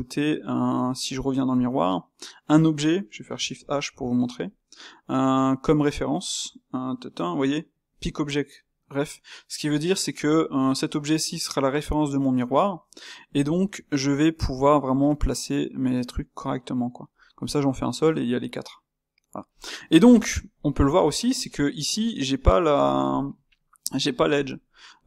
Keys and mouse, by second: 1.9 space, 14.7-21.9 middle drag, 21.9 click, 22.3-25.0 middle drag.